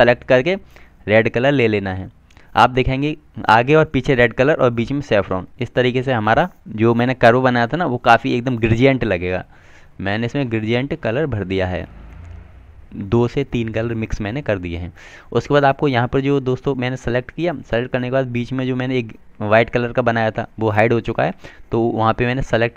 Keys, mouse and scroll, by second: 7.4 click, 18.1 click.